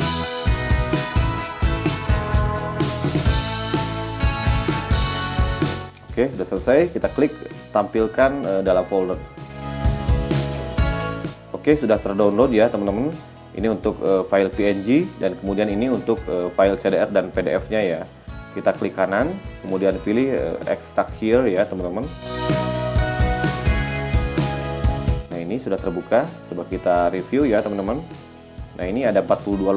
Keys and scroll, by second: 28.2 g.